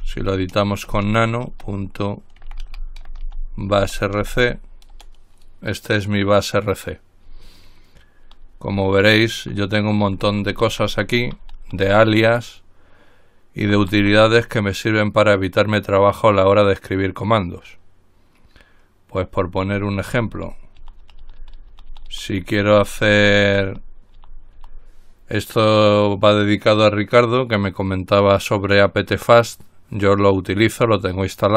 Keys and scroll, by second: 0.0-4.4 typing, 5.2 Return, 7.5 Down, 8.0 Down, 8.4-9.5 typing, 11.2 typing, 19.8 Down, 20.0-24.8 typing.